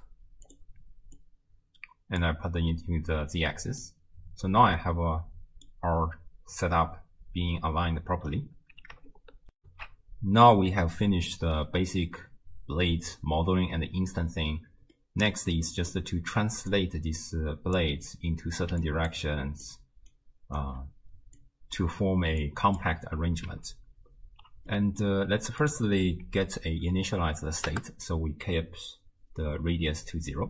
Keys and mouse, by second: 1.2-2.3 drag, 3.9-5.8 middle drag, 9.6 ctrl+alt+shift+w, 9.6 ctrl+alt+shift+q, 15.1 middle click, 16.7-17.8 drag, 18.7 d, 18.8 click, 19.2-20.1 d, 19.3 click, 20.1 click, 20.7 d, 21.4 click, 21.4 d, 22.4 click, 24.7 click, 25.6-27.7 drag.